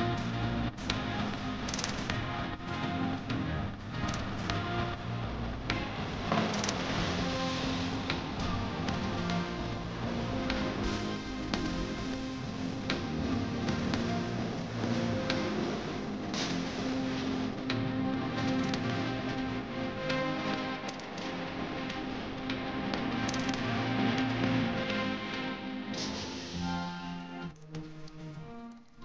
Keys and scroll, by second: 1.5 shift+F2, 1.9 Escape, 7.8 7, 8.3 space, 8.7 e, 9.8 s, 9.9 space, 19.6 ctrl+z, 25.4 shift+Home, 27.0-29.0 typing.